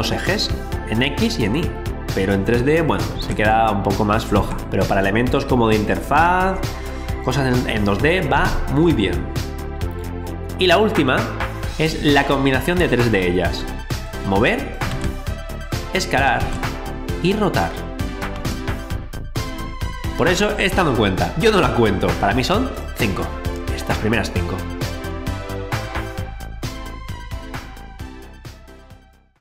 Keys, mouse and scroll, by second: 3.1 ctrl+z, 4.3 ctrl+z, 10.7 click, 12.1 alt+click, 14.9 ctrl+z, 15.6 click, 16.4 ctrl+z, 17.2 click, 18.4 ctrl+z, 22.7 click.